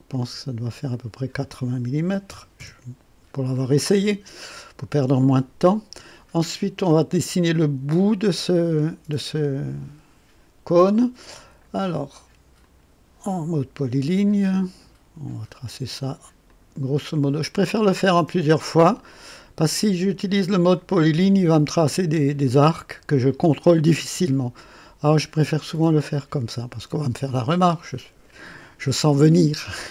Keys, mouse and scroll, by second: 0.9 click, 2.0 KP_8, 2.3 KP_0, 2.6 KP_Enter, 12.6 click, 16.4 click, 18.0 click, 20.7 click, 23.2 click, 24.7 right click, 25.5 scroll up 1, 25.9 right click, 29.8 right click.